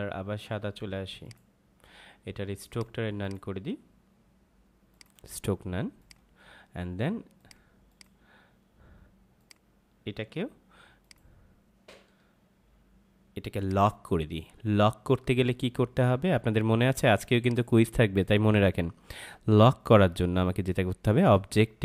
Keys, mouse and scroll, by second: 13.4 click, 17.4 click.